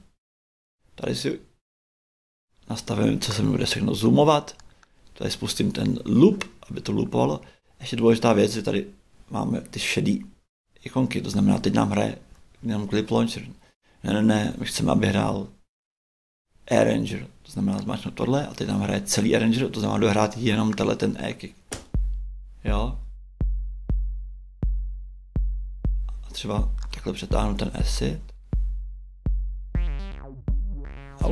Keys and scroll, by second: 11.6 shift+Right, 21.7 shift+space.